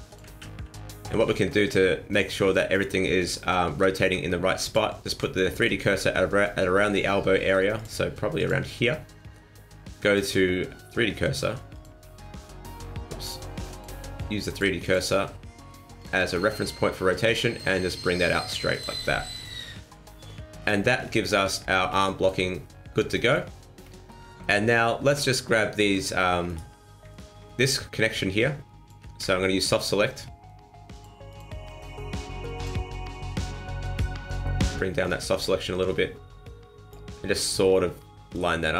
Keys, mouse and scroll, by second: 0.3 ctrl+z, 0.5 ctrl+z, 1.1 ctrl+z, 4.6 click, 7.7 click, 8.3 click, 10.2 click, 13.2 click, 14.8 click, 17.1 r, 19.3 scroll down 4, 20.5 scroll down 4, 20.9-22.0 scroll up 8, 22.0 shift+middle click, 22.6 middle click, 23.5-23.9 scroll up 2, 23.9 shift+middle click, 24.3 middle click, 25.8 Tab, 26.2 Tab, 26.4 right click, 27.1 alt+right click, 28.1 click, 29.0 ctrl+z, 30.9 click, 31.3 click, 33.4 click, 37.1 middle click, 38.3 click.